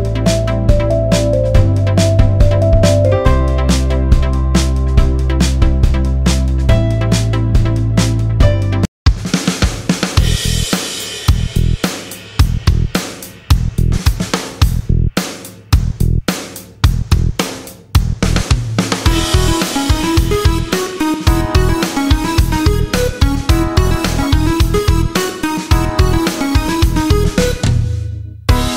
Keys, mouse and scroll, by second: 0.1-0.4 alt+scroll down 1, 0.4-1.2 alt+scroll up 1, 1.3 click, 1.8 double click, 2.3 click.